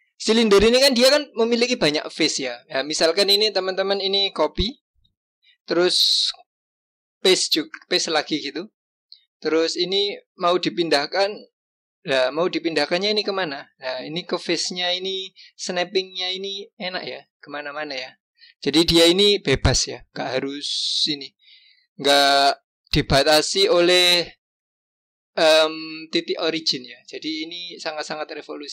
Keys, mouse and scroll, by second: 0.3-1.0 scroll up 1, 1.0-3.4 scroll up 1, 5.0 ctrl+c, 7.4 ctrl+v, 9.6 g.